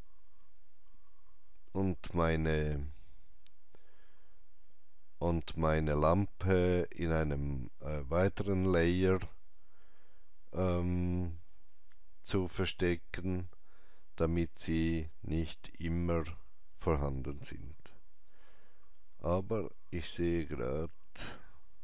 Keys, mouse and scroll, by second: 2.1 Tab, 2.1 click, 2.1 scroll up 1, 3.3 scroll down 1, 11.2-11.7 scroll down 1, 11.7 scroll up 1, 19.2 scroll up 1, 20.4 scroll, 20.6-21.8 scroll down 1.